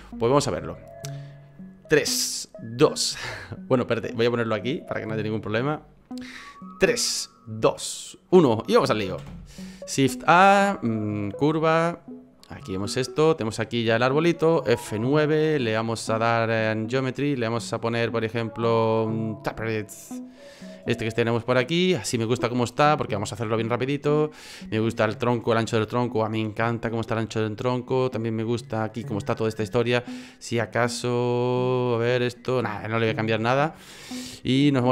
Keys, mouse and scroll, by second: 5.1 click, 9.2 shift+a, 12.6 middle click, 13.2 right click, 14.9 F9.